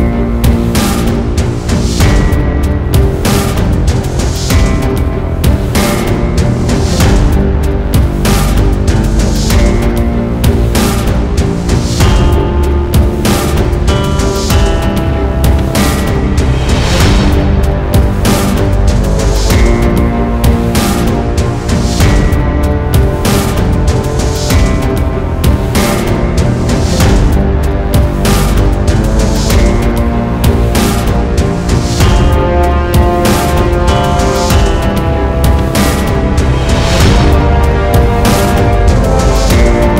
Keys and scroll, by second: 16.7 Left, 17.6 Right, 18.8 Left, 20.0 Right, 26.4 Right, 27.8 Left, 34.6 c.